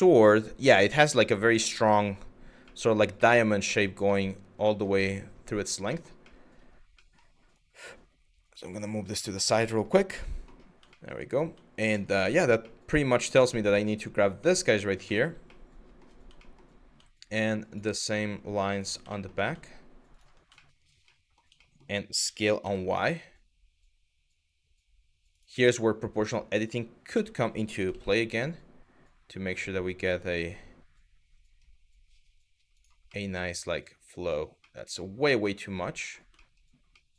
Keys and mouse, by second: 2.9 middle click, 5.5 middle click, 5.9 middle click, 6.7 middle click, 9.4 middle click, 10.6 shift+middle click, 11.5 shift+click, 11.9 shift+middle click, 12.3 middle click, 13.5 middle click, 14.2 middle click, 14.7 shift+middle click, 15.2 middle click, 16.0 shift+middle click, 17.3 shift+click, 17.7 shift+click, 18.3 shift+click, 18.8 shift+middle click, 20.2 shift+middle click, 20.7 middle click, 21.2 shift+middle click, 21.9 s, 22.2 y, 25.9 click, 26.8 s, 27.5 y, 32.4 click, 32.8-33.9 middle drag, 34.3 middle click, 35.2 middle click, 36.1 shift+middle click, 36.5 middle click.